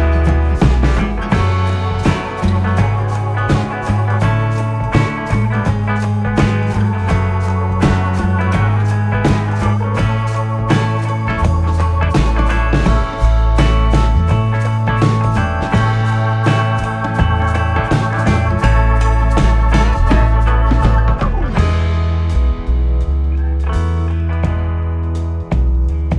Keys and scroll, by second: 1.5 p, 1.9 3, 2.7 4, 4.3 3, 5.6 4, 6.2 3, 7.4 shift+p, 8.6 p, 10.2 p, 11.2 p, 12.1 p, 14.5 ., 16.8 ctrl+z, 18.3 p, 18.8 ctrl+z, 22.1 Delete, 23.3 Delete, 24.8 Escape.